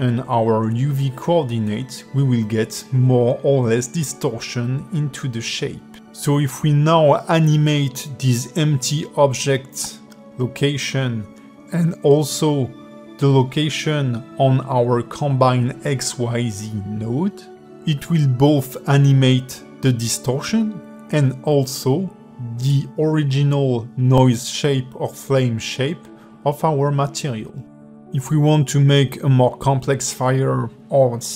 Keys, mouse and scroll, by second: 0.1 click, 0.7 g, 3.9 g, 10.2 g, 14.1 g, 18.9 g, 24.0 click, 25.3 click, 26.0 shift+click, 26.6 g, 28.0 click, 28.6 click, 29.0 g, 30.2 click, 30.9 click.